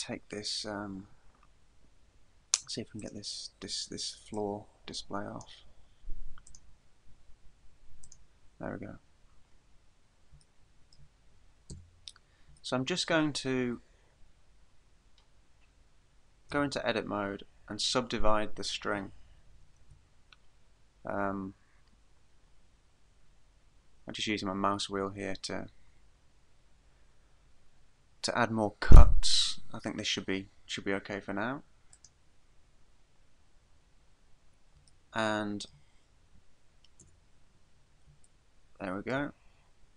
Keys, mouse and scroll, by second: 3.0 click, 4.3 click, 6.5 click, 8.0 click, 9.8 scroll up 2, 10.6 shift+middle click, 11.7 Tab, 12.8 shift+middle click, 13.4-13.8 scroll up 3, 16.5 a, 17.4-18.1 scroll up 3, 19.8 ctrl+r, 32.1 click, 35.1 shift+middle click, 37.0 Tab, 37.8-38.5 scroll down 1, 38.5 shift+middle click, 38.5 scroll down 1, 39.4-39.9 scroll down 2.